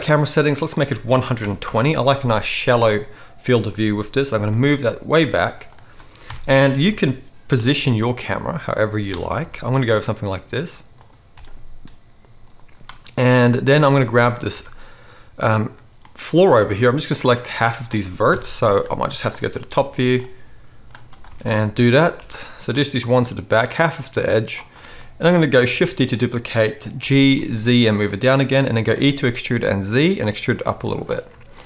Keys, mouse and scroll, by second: 0.4-5.7 drag, 4.2 g, 5.7-14.0 middle drag, 6.2 KP_0, 7.5 g, 9.4 g, 11.3 g, 14.5 Tab, 16.0 middle click, 16.2-31.6 middle drag, 18.3 KP_7, 18.5 z, 19.7 c, 21.2 alt+a, 22.1 c, 25.8 shift+d, 26.9 g, 28.8 e, 30.6 z.